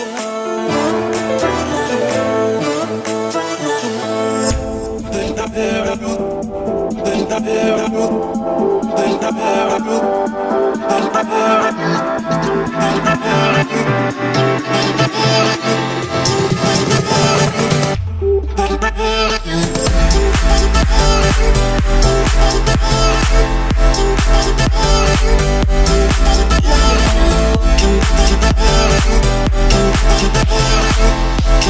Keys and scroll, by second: 0.5 Return, 0.9 Escape, 1.3 o, 2.6 Escape, 6.7 Return, 6.9 Escape, 7.5 o, 8.0 Escape, 12.3 Return, 12.5 Escape, 15.5 Escape, 15.9 o, 29.4 Escape, 30.9 Escape.